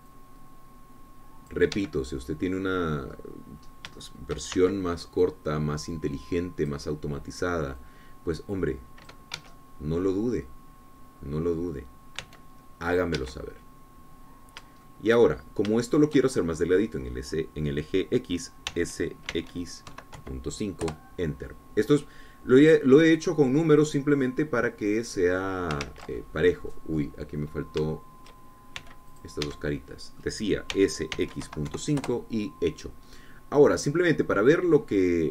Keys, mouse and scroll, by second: 1.6-3.2 drag, 3.2 Escape, 3.4-4.8 middle drag, 5.1 scroll up 1, 5.5 shift+middle click, 6.2 shift+c, 6.7-8.4 drag, 9.3-10.8 drag, 10.8 Escape, 11.0-13.2 middle drag, 13.7 c, 14.4 click, 14.7 Escape, 14.8-16.7 drag, 16.7-17.3 shift+scroll down 1, 17.3 shift+click, 20.2 s, 20.8 x, 21.4 KP_Decimal, 21.7 KP_5, 22.3 KP_Enter, 23.8 scroll down 2, 24.1-27.3 drag, 27.4 ctrl+z, 27.7 ctrl+click, 29.4 shift+click, 30.3 c, 30.6 click, 30.9 Escape, 31.2 click, 32.2 s, 32.7 x, 32.9 KP_Decimal, 33.2 KP_5, 33.5 KP_Enter, 34.6-35.3 scroll down 2.